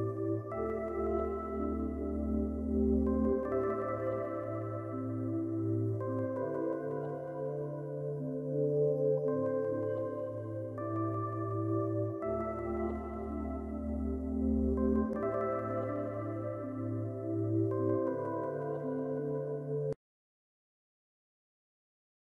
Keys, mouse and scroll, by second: 2.7 scroll, 2.9 scroll down 1, 3.3-3.9 scroll, 6.1 s, 9.3 scroll up 1, 12.2 ctrl+shift+click, 13.0-13.8 ctrl+scroll up 3, 14.2 middle click, 15.3 ctrl+scroll down 1, 16.3 middle click.